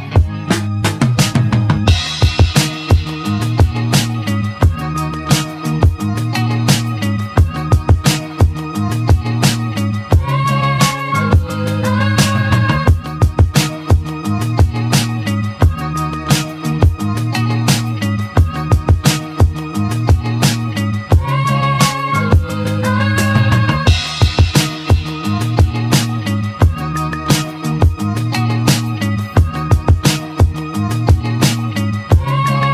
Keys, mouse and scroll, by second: 1.5 r, 3.8-6.3 middle drag, 9.6 shift+click, 10.7 shift+click, 11.9 shift+click, 12.5 shift+click, 13.4 shift+click, 14.1 ctrl+click, 15.9 shift+d, 19.9 shift+d, 24.0-25.5 shift+middle drag, 25.5 shift+d, 29.0 click, 29.8 x, 30.4 x, 31.0-31.4 scroll down 2.